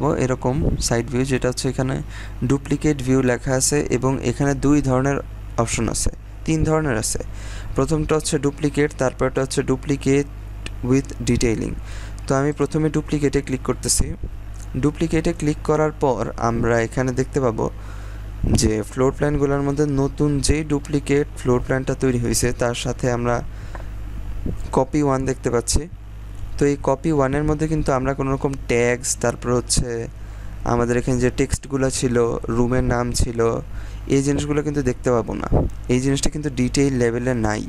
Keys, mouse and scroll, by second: 12.5 click, 14.2-14.9 scroll down 1, 14.9-15.7 scroll up 1, 15.7-16.3 scroll down 1, 27.7-29.0 scroll up 1, 29.9-31.3 scroll down 1, 32.5-33.3 scroll up 1, 33.3-34.3 scroll down 1, 35.7-36.3 scroll up 1, 36.7-37.6 scroll down 1.